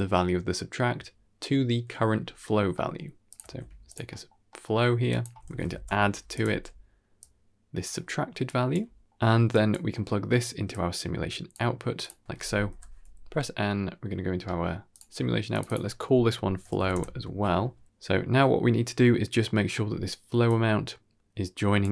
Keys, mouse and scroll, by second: 2.6 middle click, 3.1 click, 3.3 shift+d, 4.0 middle click, 4.4 middle click, 5.0-6.3 drag, 5.5 d, 6.4 alt+s, 7.1-7.8 drag, 8.3 click, 8.6 scroll down 1, 8.7 middle drag, 9.4 click, 9.8 middle click, 10.6-11.8 drag, 12.6 n, 14.3 middle click, 14.8 click, 15.4 click, 15.5-16.8 drag, 17.2 ctrl+s, 17.7 middle click, 17.7-18.2 scroll down 2, 17.7 shift+space, 18.9 middle click, 19.6 middle click, 20.4-21.7 drag.